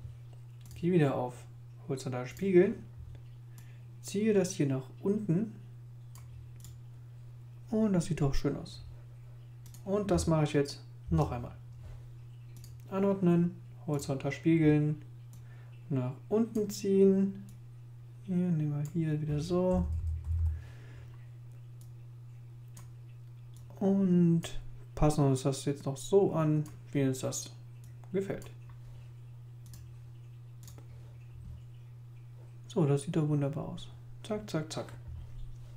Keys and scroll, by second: 11.0 super+j, 19.7 Right, 20.2 Up.